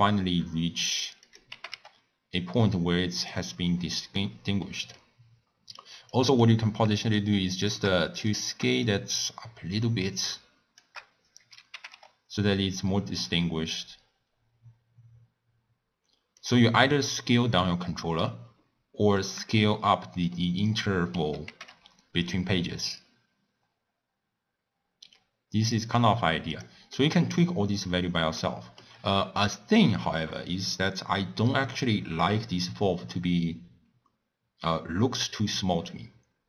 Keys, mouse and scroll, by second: 1.5 g, 3.8-5.2 middle drag, 5.2-6.1 scroll up 1, 6.1 click, 7.0 shift+scroll up 1, 7.2-8.3 shift+drag, 8.8-11.7 shift+drag, 11.7 g, 20.3-21.5 middle drag, 21.5 g, 27.0-28.3 middle drag, 28.3 scroll down 1, 28.4-30.1 middle drag, 30.1-33.4 scroll up 2.